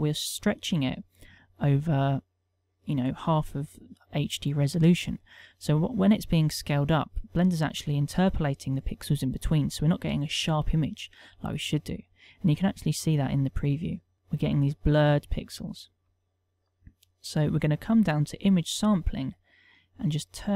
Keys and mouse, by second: 2.1 click, 7.1 click, 13.3 click, 15.3 click, 16.5 middle click, 18.2 click, 19.0 middle click, 20.3 click.